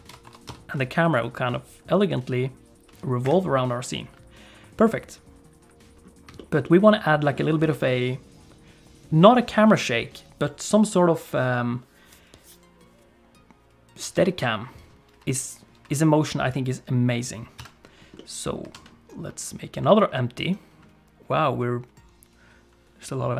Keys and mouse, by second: 0.0 ctrl+space, 0.2 r, 6.4 shift+middle click, 6.6 middle click, 17.5 KP_3, 18.1 middle click, 18.7 shift+a.